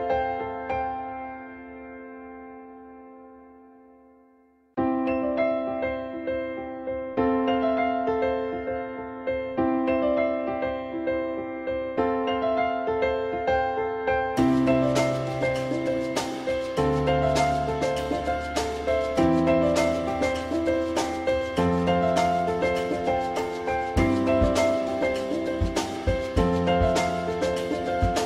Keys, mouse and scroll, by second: 0.0 ctrl+click, 4.2 alt+x, 8.0 ctrl+z, 9.1 alt+click, 9.9 alt+middle click, 11.7 ctrl+z, 13.5 ctrl+z, 13.9 ctrl+y, 23.3 alt+middle click, 26.0 ctrl+click, 26.8-27.2 typing.